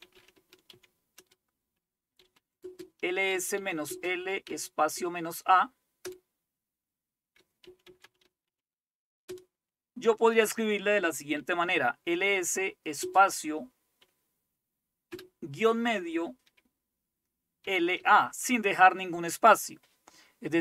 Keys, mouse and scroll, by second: 0.0-6.1 typing, 7.4-9.3 typing, 11.4-11.8 typing, 13.1 typing, 15.3 typing, 17.7-18.2 typing.